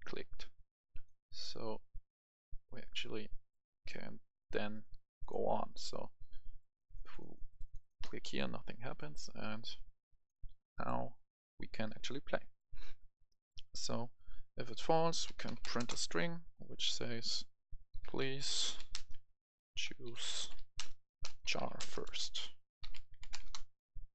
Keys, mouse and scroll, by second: 11.9 Escape, 12.3 right click, 13.6 scroll up 1, 13.8 right click, 14.5 click, 15.2-15.6 typing, 15.7 Return, 16.8 click, 17.9-23.1 typing, 23.4 Return.